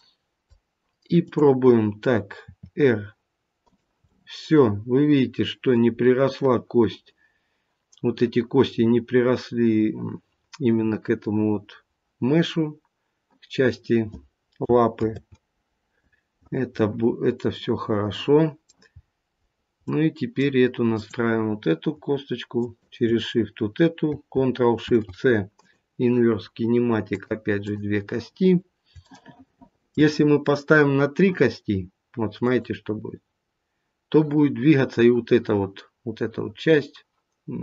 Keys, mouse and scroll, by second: 1.2 click, 2.4 r, 4.0 middle click, 4.5 middle click, 5.9 scroll up 1, 14.9 ctrl+z, 17.1-17.7 scroll down 2, 17.5 middle click, 18.9-19.7 scroll up 5, 19.7 middle click, 20.9 click, 22.5 shift+click, 24.7 ctrl+shift+c, 27.0 click, 27.6 click, 28.9 shift+middle click, 32.4 click.